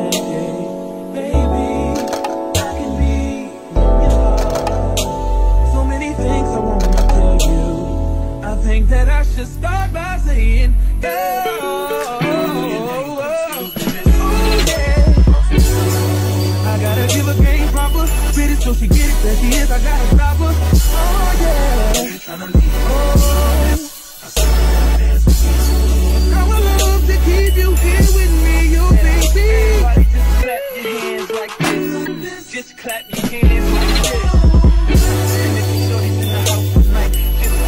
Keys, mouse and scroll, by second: 6.4 middle click, 6.9-8.0 drag, 8.0 middle click, 8.5 click, 8.8-12.9 middle drag, 9.4 r, 11.0 ctrl+z, 12.1 KP_1, 12.9 click, 13.0-14.8 middle drag, 13.4 r, 15.1 ctrl+z, 16.5-19.8 drag, 20.4 r, 21.4 click, 21.5 middle click, 22.1 click, 23.5 shift+d, 23.6 middle click, 23.9 ctrl+a, 24.3 click, 24.3 middle click, 25.0 shift+d, 25.0 middle click, 25.3 ctrl+a, 25.4-27.1 middle drag, 26.6 a, 27.1-33.9 drag, 33.9-36.5 middle drag, 36.5-37.6 drag.